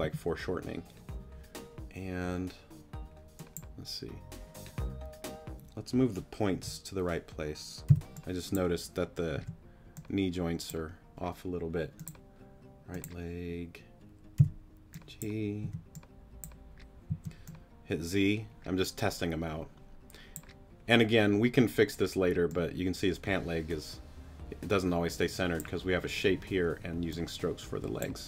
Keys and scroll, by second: 6.5 g, 7.9 g, 9.3 t, 14.4 g, 15.6 t, 17.1 z.